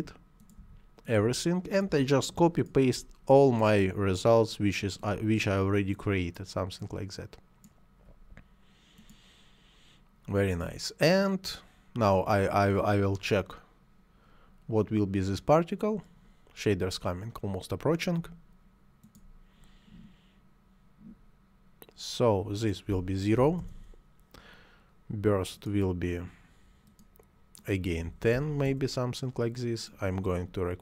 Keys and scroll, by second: 23.2 0, 23.4 Return, 27.8 1, 27.9 0, 28.4 Return.